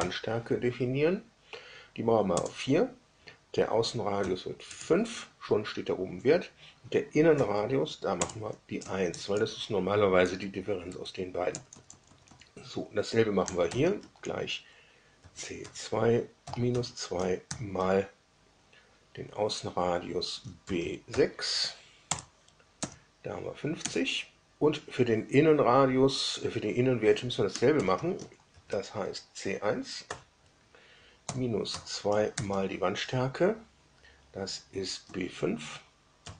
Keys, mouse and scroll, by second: 2.3 Return, 4.1 5, 4.6 Return, 7.3 1, 8.1 Return, 8.7 Up, 9.0 Up, 9.3 Up, 10.1 Down, 11.5 Up, 11.6 Up, 11.8 Up, 12.0 Up, 13.6 0, 15.1 shift+c, 15.6 shift+2, 16.4 -, 16.6 2, 20.6 shift+b, 21.0 shift+6, 22.0 Return, 22.7 Up, 23.7 Down, 27.7 shift+0, 28.5 shift+c, 30.0 1, 31.2 -, 31.6 2, 36.1 shift+b.